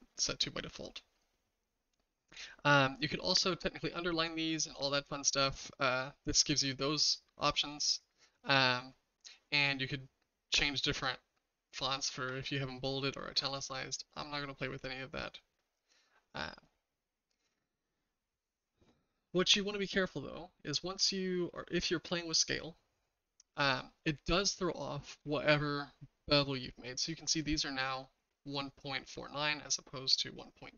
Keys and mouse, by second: 16.5 click, 22.9 s, 24.6-25.1 shift+middle drag.